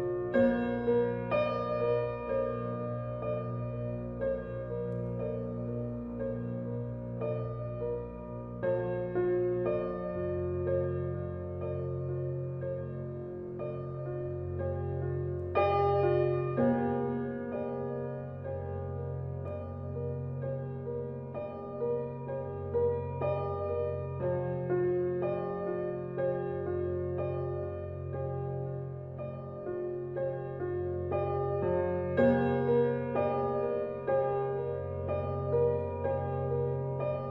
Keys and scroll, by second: 27.8 typing, 29.9-30.7 typing, 36.1 typing.